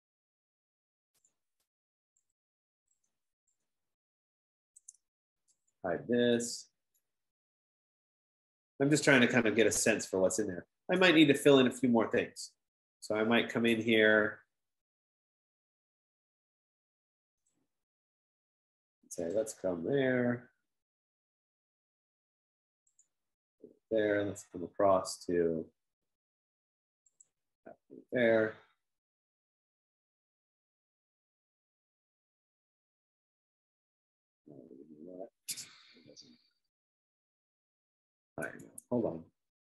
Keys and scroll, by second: 5.4-6.8 typing, 39.0 Escape, 39.6 F15.